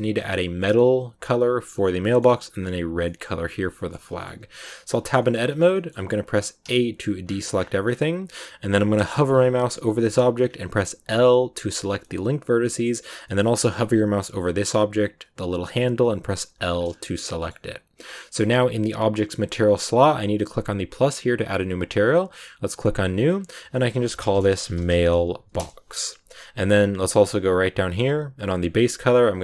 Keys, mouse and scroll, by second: 0.7-1.9 scroll down 2, 1.9-3.9 middle drag, 3.9 scroll down 2, 4.1 middle click, 4.2 Tab, 5.1 scroll up 1, 5.1 middle click, 5.3 scroll down 1, 5.4-6.5 shift+middle drag, 6.5 a, 7.1-9.1 scroll up 10, 9.1-10.3 scroll up 1, 10.3-10.9 scroll up 1, 10.9 l, 11.9-16.7 middle drag, 16.7 scroll down 1, 16.8 scroll up 1, 16.8 scroll down 1, 16.9 middle click, 17.9-20.9 scroll up 2, 21.0-23.2 drag, 23.3-26.3 drag, 26.6 scroll down 2, 27.2 scroll down 4, 28.5 click.